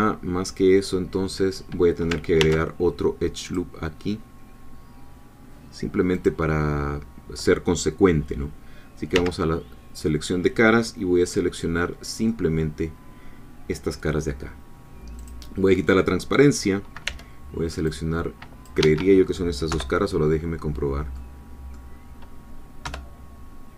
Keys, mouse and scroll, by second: 2.4 ctrl+r, 3.4 click, 6.2 click, 9.1 3, 11.3-12.4 middle drag, 12.5-14.3 scroll down 1, 15.2 click, 17.1 c, 17.9-19.5 drag, 18.8 Escape, 19.7 3, 21.1 middle click, 22.9 3.